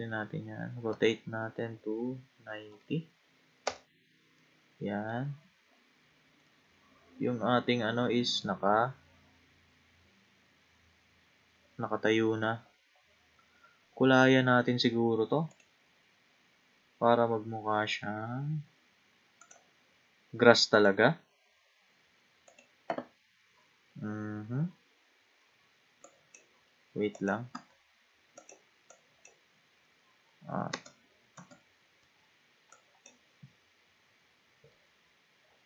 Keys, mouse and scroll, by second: 0.9 r, 4.4-5.4 middle drag, 5.4-6.5 scroll up 9, 6.5-8.8 middle drag, 8.8-10.1 scroll down 3, 10.1-11.5 scroll down 4, 11.5-12.0 scroll up 6, 13.5-14.0 scroll down 8, 15.5 click, 18.1-19.4 scroll up 8, 19.4-21.5 drag, 21.5-22.1 scroll up 3, 22.5 click, 26.0 click, 27.2 click, 27.5 a, 28.4 click, 28.9 click, 30.7 Tab, 31.3 Tab, 32.0 w, 32.7 click.